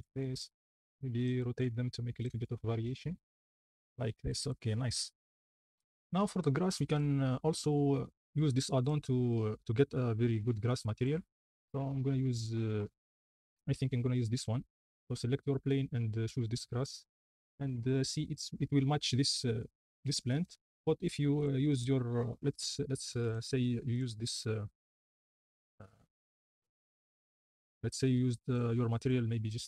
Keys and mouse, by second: 0.5 y, 1.6 r, 1.9 z, 2.3 s, 5.0 ctrl+s, 6.4-7.0 shift+middle drag, 8.8-10.2 middle drag, 11.0 middle click, 16.4 click, 19.9 click, 21.3-21.8 drag, 23.3-26.3 drag, 27.5 shift+middle click, 28.5-28.9 drag.